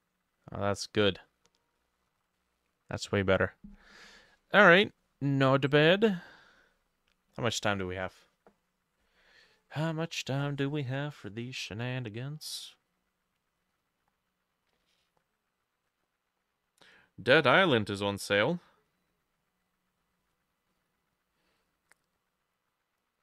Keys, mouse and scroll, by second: 0.7 middle click, 1.3 middle click, 1.8 middle click, 2.4 middle click, 4.1 middle click, 4.8 middle click.